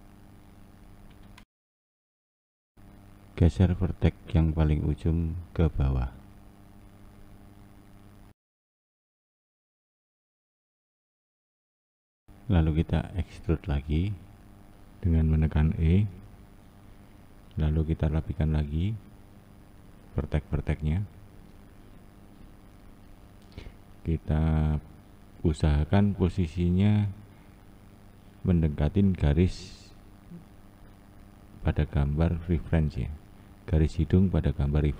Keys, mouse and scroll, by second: 4.9 1, 5.6 Left, 6.4 Left, 8.4 click, 9.8 click, 11.9 ctrl+z, 12.4 shift+click, 14.1 e, 21.5 click, 23.1 1, 25.0 click, 25.5 click, 31.7 click, 32.3 click.